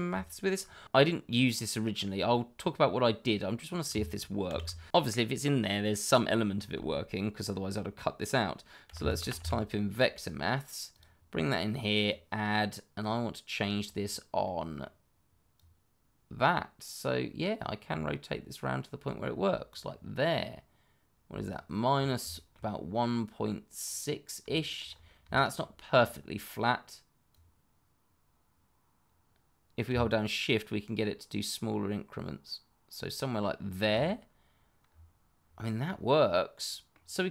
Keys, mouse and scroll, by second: 4.4 shift+a, 8.8 v, 8.9 e, 9.3 t, 10.9 click, 14.0-14.4 scroll down 1, 14.4 middle click, 15.5 click, 21.9 scroll up 1, 22.3 shift+middle click, 22.5-24.4 shift+scroll up 1, 24.5 shift+middle click, 24.6 middle click, 24.7 shift+middle click, 24.8-25.3 scroll up 1, 25.3 shift+middle click, 27.3 click, 30.0 shift+click, 34.0 shift+click, 34.8-35.8 scroll down 1, 35.8 middle click.